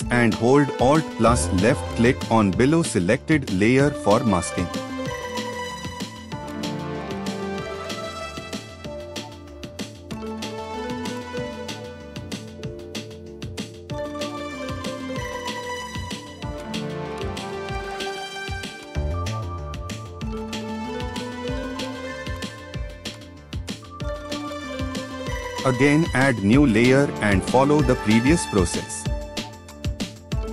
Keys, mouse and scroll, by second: 1.9 alt+click, 4.6 ctrl+t.